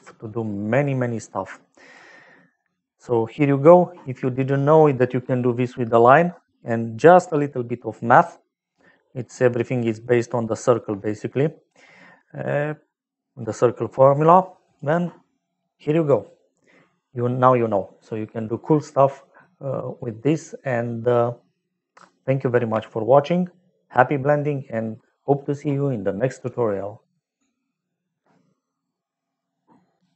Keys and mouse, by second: 0.7 click, 3.0 middle click, 9.0 middle click, 14.3 click.